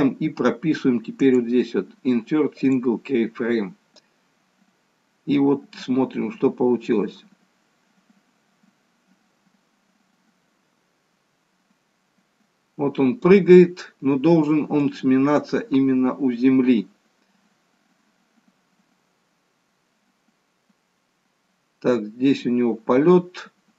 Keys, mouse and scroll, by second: 1.2 right click, 4.0 click, 14.9 click.